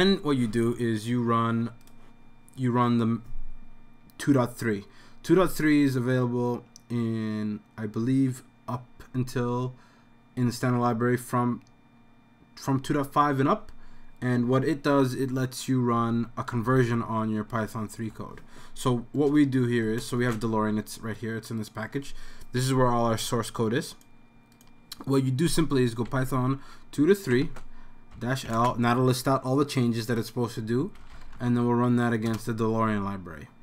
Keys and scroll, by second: 15.9-18.1 typing, 19.3-19.7 BackSpace, 25.4-28.6 typing, 30.7-31.7 typing, 32.3 Return.